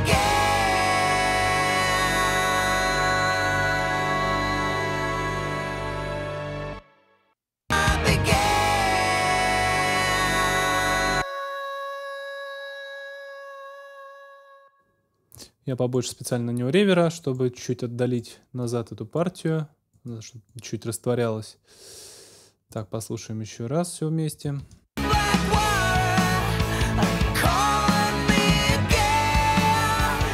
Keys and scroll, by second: 6.4 space, 14.3 space, 24.6 space.